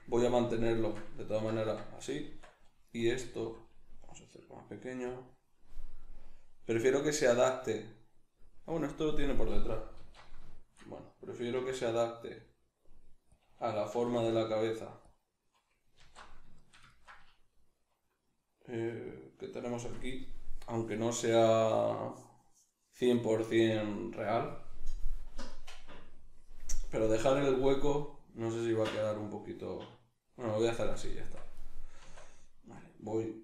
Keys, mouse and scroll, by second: 1.6 Tab, 2.0 right click, 2.2 Tab, 3.0 a, 5.2 click, 10.0 alt+q, 10.4-11.6 shift+middle drag, 11.6 r, 13.4 click, 14.0 g, 15.2 click, 16.0 alt+q, 16.6-20.9 shift+middle drag, 31.2 Tab, 31.6 right click, 32.0 Tab, 32.8-33.4 right drag.